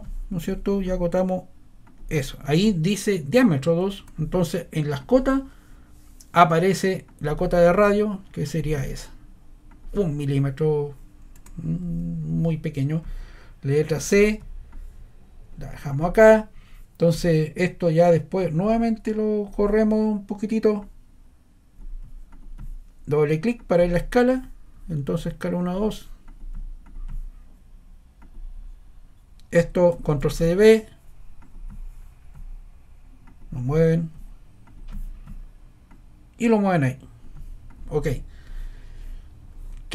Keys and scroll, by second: 30.0 super+c, 30.2 super+v.